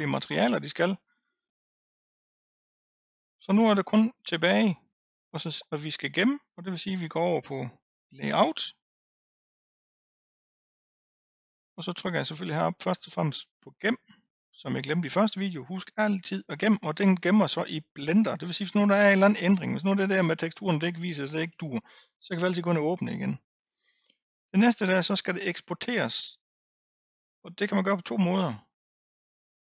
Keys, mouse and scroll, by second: 8.1 click, 8.9-10.7 scroll down 3, 12.6-15.8 drag, 28.7-29.7 drag.